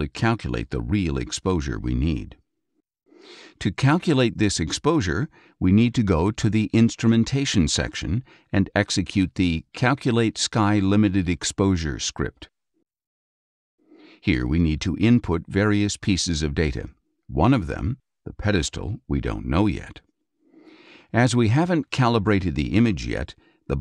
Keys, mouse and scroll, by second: 7.0 click, 9.8 click, 13.3 click, 22.3-23.3 drag.